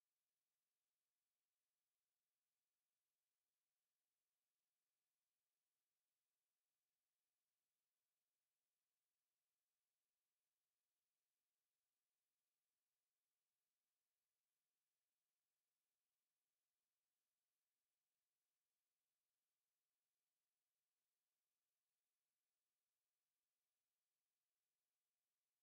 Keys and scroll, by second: 2.9 ctrl+g, 21.2 ctrl+g.